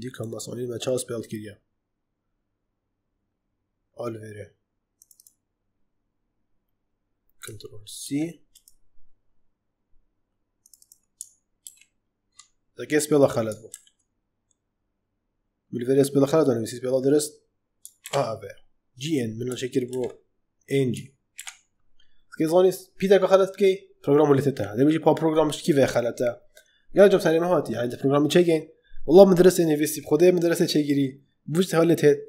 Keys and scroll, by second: 7.9 ctrl+c, 11.5 ctrl+v, 13.6 ctrl+z, 17.9 ctrl+v, 19.8 ctrl+z, 21.2 ctrl+v.